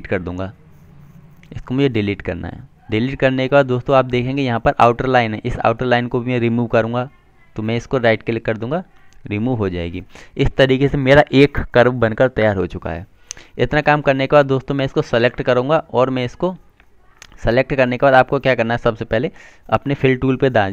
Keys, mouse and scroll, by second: 4.0 Delete, 7.2 click, 9.0 right click, 9.8 click, 15.2 click.